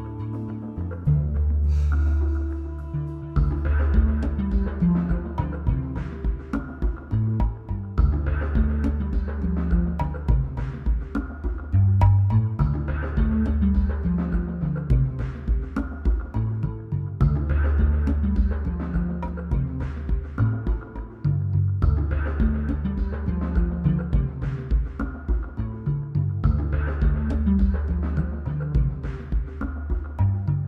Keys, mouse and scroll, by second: 0.8-3.6 shift+drag, 6.9 click, 7.5 BackSpace, 9.2 Right, 10.0 BackSpace, 15.0 BackSpace, 19.3 click.